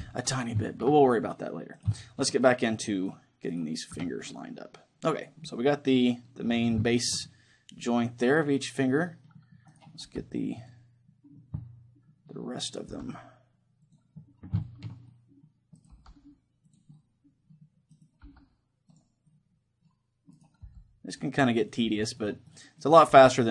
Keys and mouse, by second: 0.0 Escape, 0.8-3.8 middle drag, 1.8-5.2 right drag, 4.0 Tab, 4.3-9.1 middle drag, 9.7-11.5 right drag, 10.1 g, 10.7-12.4 drag, 11.6 middle click, 12.9 g, 13.9 click, 15.7 click, 15.9 g, 17.6 click, 18.3 g, 18.8 right click, 19.6-20.7 drag, 19.6-21.1 middle drag, 19.6 right click, 20.4-23.5 right drag, 20.7 g, 21.7-23.1 drag, 21.9 g, 23.1 g.